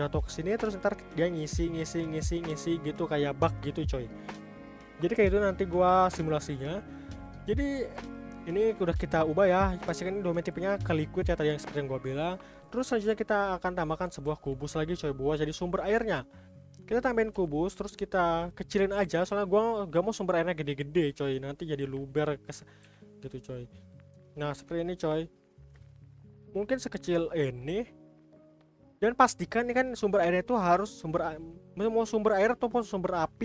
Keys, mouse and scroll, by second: 5.4-5.9 scroll up 3, 5.9-7.1 scroll down 1, 7.1 click, 7.9 click, 10.0 click, 10.9 click, 11.4-12.6 drag, 14.2 shift+a, 18.9 g, 20.8-21.4 scroll up 3, 21.4-22.8 shift+middle drag, 22.8 s, 23.8-26.4 middle drag, 26.4 s, 27.9-31.0 middle drag.